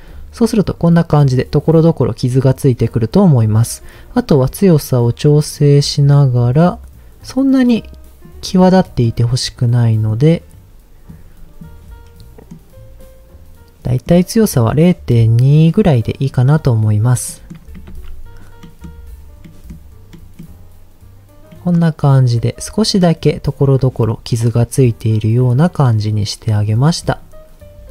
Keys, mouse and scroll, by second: 1.5-2.7 scroll down 3, 4.1-5.6 drag, 6.6-8.2 drag, 8.7 middle click, 9.9 middle click, 11.1 click, 12.2 middle click, 13.8 middle click, 14.7-16.3 drag, 16.8-17.3 scroll down 2, 17.3 middle click, 17.9 ctrl+s, 18.6 middle click, 19.5 middle click, 20.1 middle click, 21.5 middle click, 26.5 click, 27.0 middle click.